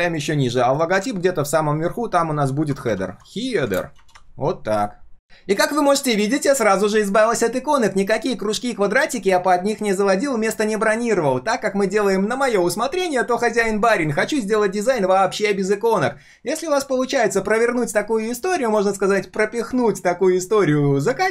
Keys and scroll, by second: 0.6 ctrl+shift+], 1.1 ctrl+r, 4.1 ctrl+s.